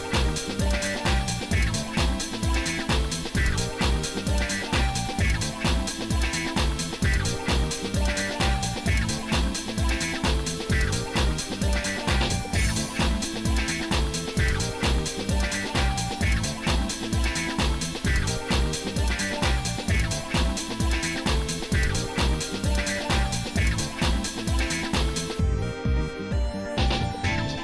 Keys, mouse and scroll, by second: 10.9 click, 18.5 click, 18.9 click, 19.3 click, 20.1 click, 21.3-27.5 drag.